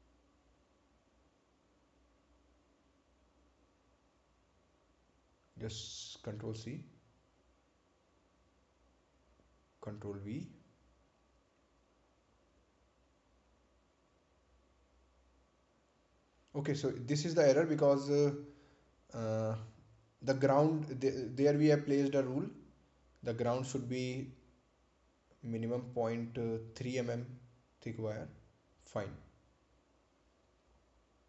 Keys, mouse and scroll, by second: 1.4 click, 7.3 ctrl+c, 8.6 click, 11.6 ctrl+v, 13.0 click, 16.5 click, 17.9 scroll up 1, 20.8 scroll down 1, 23.4 click, 25.2 Delete, 28.2 click, 31.0-31.2 scroll down 1.